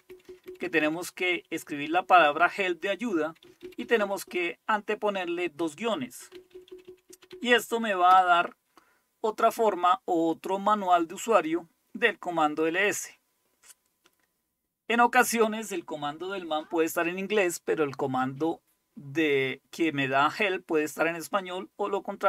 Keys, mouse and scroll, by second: 0.2 Left, 0.3 Left, 0.5 Left, 0.6 Left, 1.4 Right, 1.6 Right, 1.8 Right, 2.0 Right, 2.2 Right, 2.4 Right, 3.3 Left, 3.5 Left, 3.7 Left, 3.9 Left, 6.4 Right, 6.6 Right, 6.7 Right, 6.9 Right, 8.2 Return, 10.5-14.2 scroll up 1, 14.2-14.9 scroll up 1, 14.9-17.5 scroll down 1, 19.0-22.2 scroll up 1.